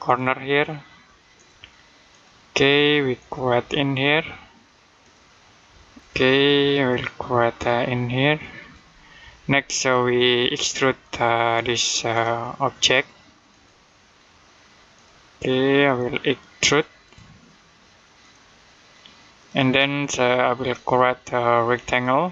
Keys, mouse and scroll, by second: 8.1 click, 10.8 click, 21.7 click.